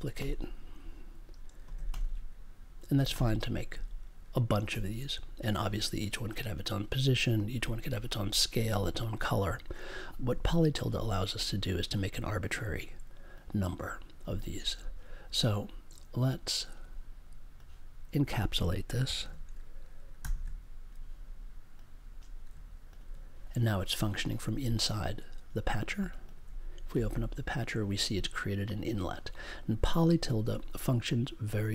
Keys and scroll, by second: 10.0 BackSpace, 20.2 shift+super+e.